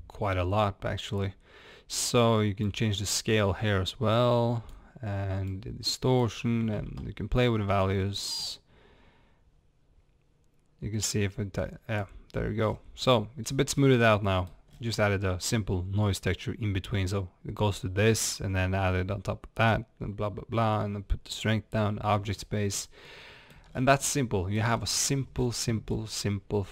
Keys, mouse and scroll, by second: 2.7-6.3 drag, 6.7 ctrl+z, 8.6-13.5 drag, 12.7 scroll down 1, 13.5 scroll up 1, 13.8-17.0 middle drag, 14.8 scroll down 1, 21.9-26.7 middle drag, 22.3 scroll up 1, 23.8 scroll down 2, 24.8-25.4 scroll up 2, 25.4-25.9 scroll down 2, 25.9-26.6 scroll up 2, 26.6-26.7 scroll up 1.